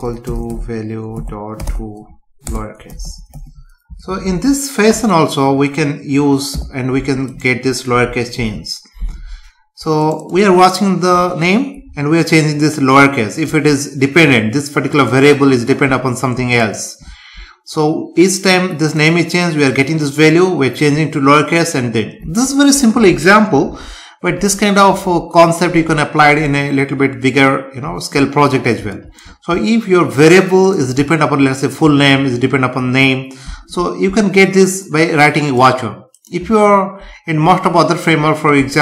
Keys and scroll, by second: 2.5 Return, 4.1 ctrl+s, 8.3 ctrl+s.